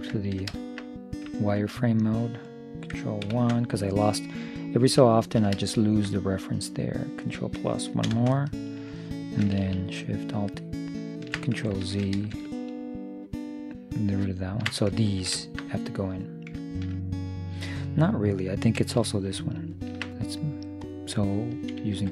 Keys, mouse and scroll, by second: 0.4 middle click, 3.4 ctrl+KP_1, 7.3 middle click, 8.3 ctrl+KP_Add, 10.3-12.2 right drag, 12.1 ctrl+z, 12.7-14.5 right drag, 15.1-18.5 middle drag, 19.7-21.6 right drag, 20.9-22.1 drag, 22.0 ..